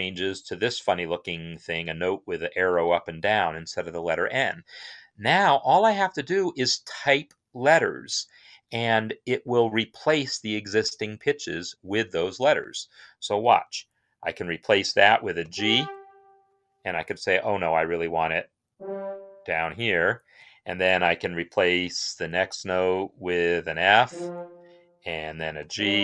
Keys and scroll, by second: 15.3 g, 18.4 ctrl+Down, 23.7 f, 25.1-26.0 typing.